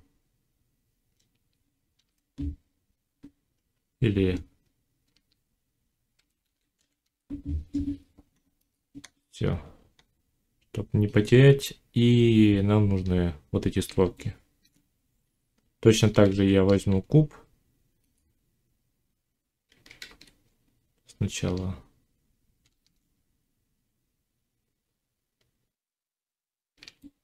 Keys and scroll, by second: 1.8 shift+e, 3.6 BackSpace, 6.0 shift+b, 6.3 a, 16.1 shift+a, 19.9 ctrl+z, 22.5 shift+s.